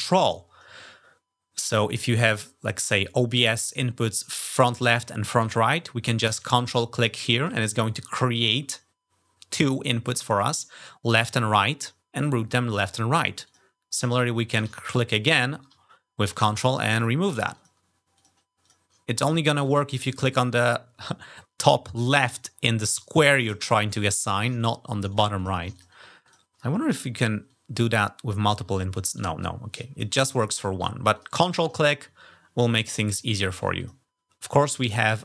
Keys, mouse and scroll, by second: 6.6 ctrl+click, 13.2 ctrl+click, 14.6 ctrl+click, 15.1 ctrl+click, 16.8 ctrl+click, 17.4 ctrl+click, 18.0 ctrl+click, 18.4 ctrl+click, 19.0 ctrl+click, 19.4 ctrl+click, 23.7 ctrl+click, 24.4 ctrl+click, 24.9 ctrl+click, 25.2 ctrl+click, 25.6 ctrl+click, 26.1 ctrl+click, 27.3-28.1 ctrl+drag, 29.2-29.8 ctrl+drag, 30.9 ctrl+click, 31.6 ctrl+click, 33.3 ctrl+click, 33.6 alt+click.